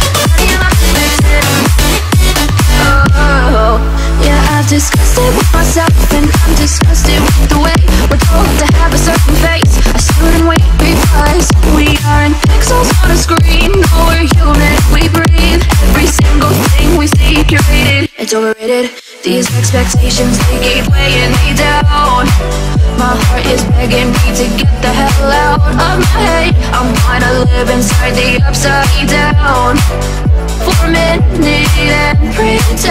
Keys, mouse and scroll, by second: 1.8 shift+middle click, 2.4 click, 3.3 space, 3.4 click, 4.3-5.1 scroll up 1, 5.1 m, 5.3 click, 6.4 Left, 6.7 click, 7.0 space, 7.2-7.9 scroll up 1, 7.9 middle click, 9.0 scroll up 1, 10.2 m, 10.2 scroll up 1, 11.1 click, 12.3 Left, 12.5 scroll down 1, 14.1 click, 14.2 space, 14.4 scroll down 1, 14.9 middle click, 15.2 scroll down 1, 15.7 shift+middle click, 16.3 click, 16.7 scroll up 1, 17.0 shift+middle click, 17.3 shift+scroll up 1, 17.4 middle click, 17.9-18.3 scroll up 1, 19.1-19.4 scroll down 1, 19.7-21.3 middle drag, 21.3 scroll down 1, 21.8-23.7 middle drag, 23.7 scroll up 1, 24.3 click, 25.1 middle click, 25.7-26.0 scroll up 1, 26.1 click, 27.0 Delete, 28.0 scroll down 1, 28.3-31.9 middle drag, 31.9 scroll up 1, 32.1-32.9 shift+middle drag.